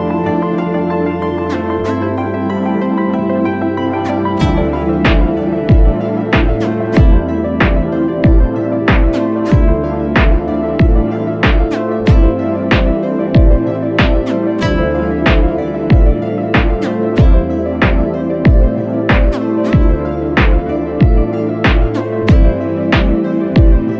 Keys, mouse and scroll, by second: 9.9 alt+shift+click, 13.0 Return, 13.3 ctrl+h, 14.0 ctrl+t, 21.9 ctrl+click.